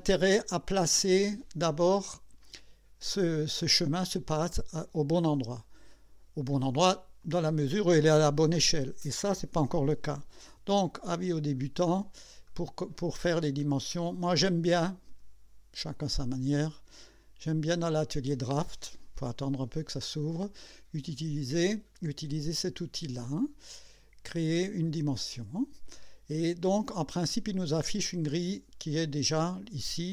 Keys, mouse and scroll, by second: 0.4 scroll up 2, 1.0 right click, 5.8 click, 7.2 click, 10.6 KP_1, 11.2 KP_2, 11.9 scroll up 2, 12.5 right click, 13.6 right click, 15.9 click, 17.1 click, 25.2 click, 26.9-27.4 scroll down 2.